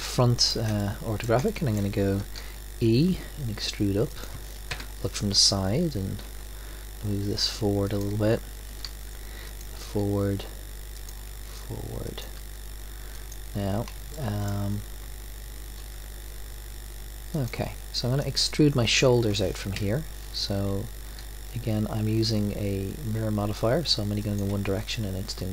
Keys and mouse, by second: 2.3 e, 4.7 KP_3, 6.2 g, 8.8 e, 9.7 e, 11.3 e, 14.1-15.8 drag, 14.1 e, 15.8 e, 18.2-19.3 drag, 19.7 KP_1, 20.2 middle click, 21.2 e.